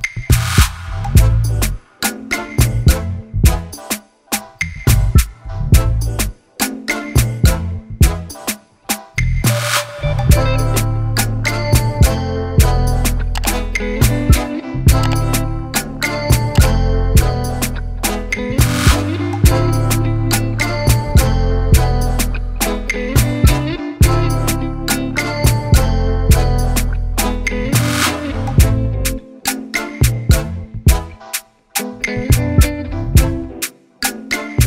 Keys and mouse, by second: 1.6 click, 2.6 click, 4.3 click, 6.3 click, 7.3 click, 7.7 click, 8.8 click, 11.5 click, 13.0 Return, 14.0-15.6 drag, 16.5 ctrl+t, 17.5 right click, 18.7 click, 19.8 click, 22.9 Return, 23.9 alt+click, 26.3 click, 26.7 click, 27.9 click, 30.1 click, 33.6-34.6 drag.